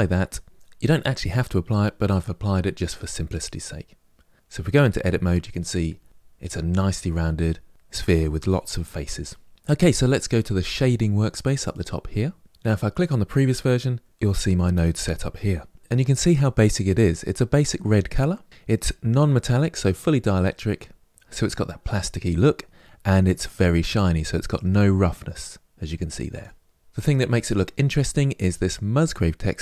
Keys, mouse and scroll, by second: 4.4 Tab, 9.5 Tab, 11.5 click, 13.1 click, 18.5 click, 24.4-28.5 drag.